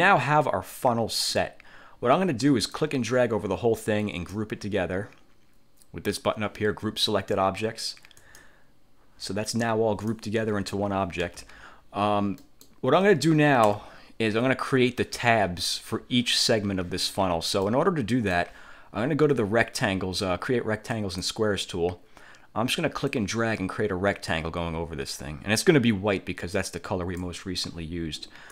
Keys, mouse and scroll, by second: 2.8-4.6 drag, 8.4 click, 9.6 click, 11.4 ctrl+z, 12.5 click, 13.8 1, 17.8 click, 21.0 click, 23.2-27.5 drag.